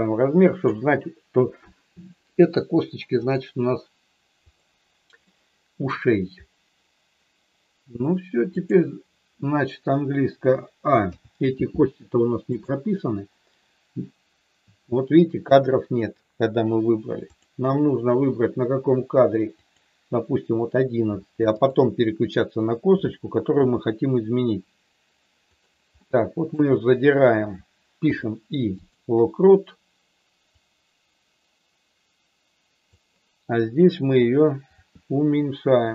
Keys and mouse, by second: 3.2 click, 4.5 click, 5.2 middle click, 8.6 click, 10.9 a, 17.4 click, 19.6 click, 21.6 click, 23.6 r, 25.5 click, 26.0 middle click, 28.0 i, 30.4-32.8 drag, 34.7 r.